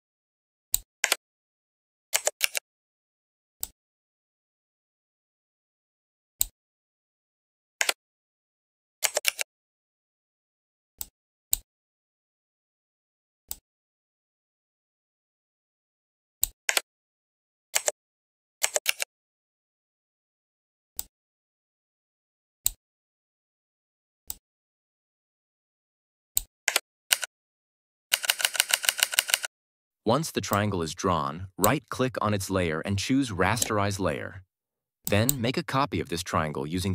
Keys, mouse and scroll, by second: 0.9 Return, 2.3 ctrl+t, 3.5-6.3 drag, 7.7 Return, 9.2 ctrl+t, 10.9-11.5 drag, 16.6 Return, 18.8 ctrl+t, 20.9-22.7 drag, 26.6 Return, 27.0 Down, 30.4-31.7 drag, 33.4 right click, 34.9 click.